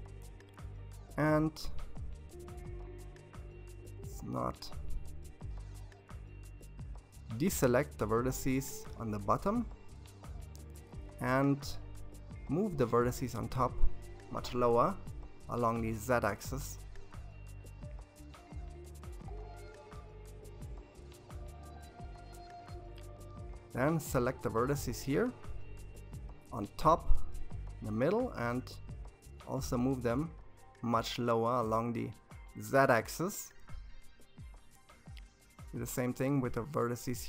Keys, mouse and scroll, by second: 3.2 c, 9.5 g, 20.0 alt+a, 22.2 c, 24.7 g, 31.0 alt+a, 33.2 c, 35.3 g.